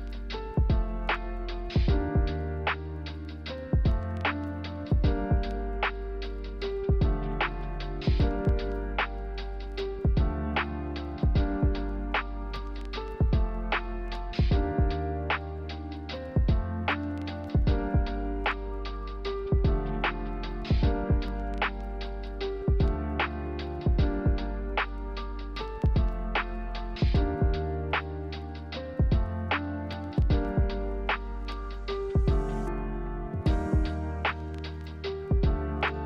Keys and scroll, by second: 2.1-3.1 typing, 3.3 Return, 7.1-7.9 typing, 11.0 typing, 13.1 Delete, 15.7-18.9 typing, 16.8 ctrl+z, 20.9 k, 25.8 j, 26.5 Delete, 27.3 k, 32.9 ctrl+z.